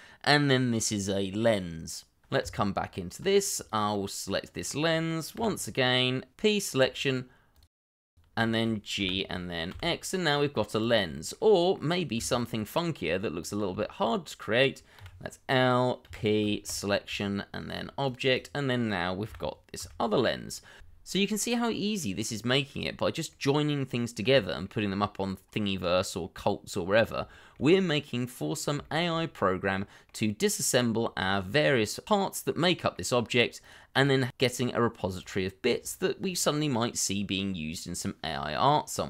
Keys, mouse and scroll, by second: 1.5 shift+middle click, 1.7-2.4 scroll up 1, 2.4 Tab, 3.9 click, 4.3 middle click, 5.3 l, 6.0 scroll down 1, 6.3 p, 7.6 Tab, 8.4 shift+middle click, 9.0 g, 9.7 x, 10.8 double click, 11.1 shift+middle click, 11.7 middle click, 12.1 Tab, 13.8 shift+middle click, 14.1 scroll up 1, 14.9 l, 16.0 p, 18.3 double click, 19.2 g, 19.7 x, 20.7 scroll down 1, 21.3 middle click, 24.4 scroll up 1, 24.7 middle click, 25.3 scroll up 1, 25.8 shift+middle click, 26.2 middle click, 26.2 scroll up 1, 26.5 middle click, 28.7 shift+middle click, 29.1 middle click, 30.2 shift+middle click, 31.1 middle click, 32.4 scroll down 1, 32.6 middle click, 35.0-35.6 scroll up 1, 35.7 double click, 36.5 middle click.